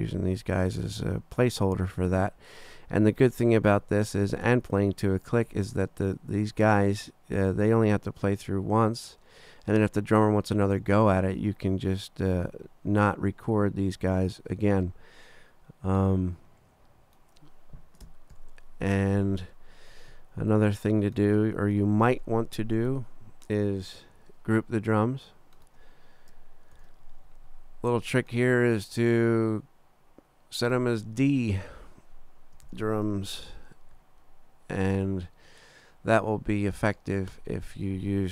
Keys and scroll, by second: 18.3 super+=, 26.8 shift+super+g, 32.4-33.9 typing.